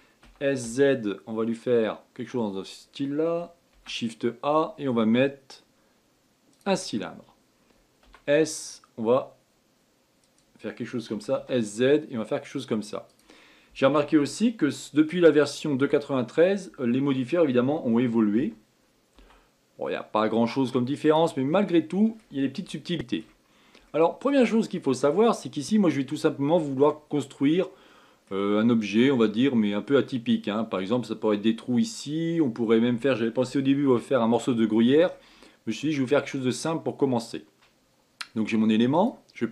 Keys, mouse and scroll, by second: 3.9 shift+a, 21.8-23.7 middle drag, 23.7-24.2 scroll up 3, 24.2-25.7 shift+middle drag, 25.7-26.1 scroll down 3, 26.1-27.5 middle drag, 27.5-27.9 scroll down 2, 27.9-30.0 middle drag, 30.0-30.8 scroll up 2, 30.8-33.4 scroll down 1, 33.4-33.8 scroll down 1, 35.5-38.5 middle drag, 39.3 click.